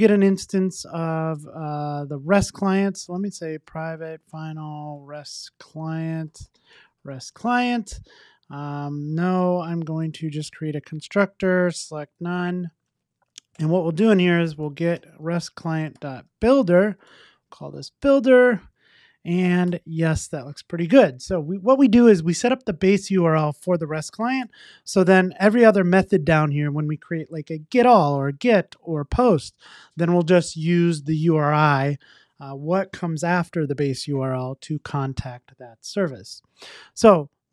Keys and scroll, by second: 7.3 Return, 9.4 super+n, 16.5 Return, 19.7 Tab.